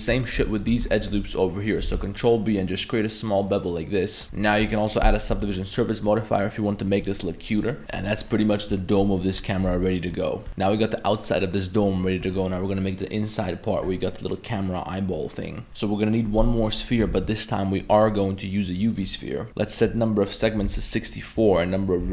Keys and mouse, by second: 0.2 alt+right click, 0.5 alt+shift+right click, 0.9-1.6 ctrl+middle drag, 1.8 ctrl+b, 4.2 Tab, 4.3-4.6 middle drag, 5.1 ctrl+1, 5.6-6.1 middle drag, 6.4-7.2 middle drag, 7.6 middle click, 8.0 middle click, 9.2 middle click, 9.7 Tab, 9.8-10.2 middle drag, 11.6 middle click, 17.1 shift+a, 19.3 middle click, 19.8-21.1 drag, 21.4 click.